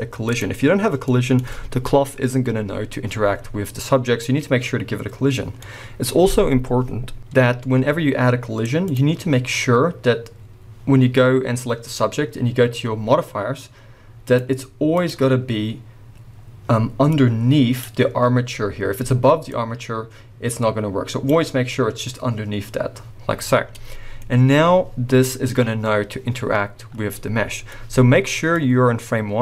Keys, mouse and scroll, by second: 0.3 click, 1.1-8.9 middle drag, 6.2-7.2 scroll up 2, 8.9-13.0 drag, 14.2-17.8 drag, 19.5-21.3 drag, 23.3-23.7 scroll down 2, 23.7-28.6 middle drag, 24.3-27.1 scroll up 2, 28.6-29.4 drag.